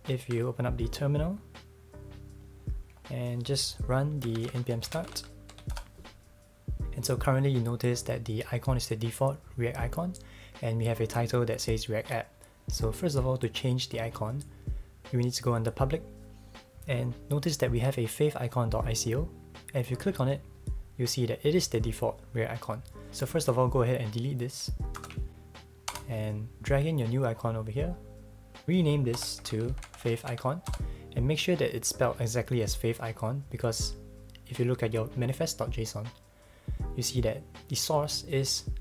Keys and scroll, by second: 0.2 ctrl+`, 4.0-6.0 typing, 25.0 super+BackSpace, 25.9 Return, 29.1 Return, 29.1-30.8 typing.